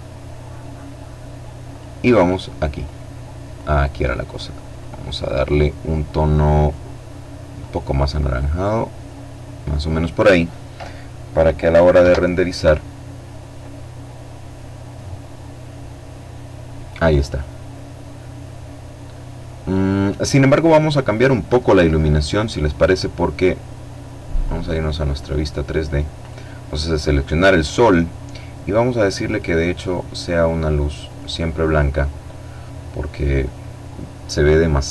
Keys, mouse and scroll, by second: 0.4 click, 1.5-2.7 drag, 2.9-5.9 drag, 6.3 click, 7.1-8.3 drag, 10.7 F12, 23.1 click, 23.9 click, 24.9 right click, 26.5 click, 27.9 click, 29.7 click, 31.9 click.